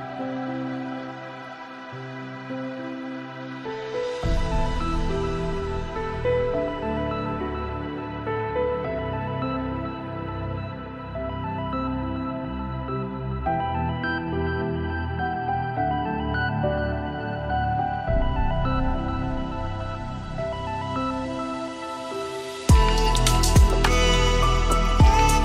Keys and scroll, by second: 10.6 ctrl+z, 17.5 ctrl+space.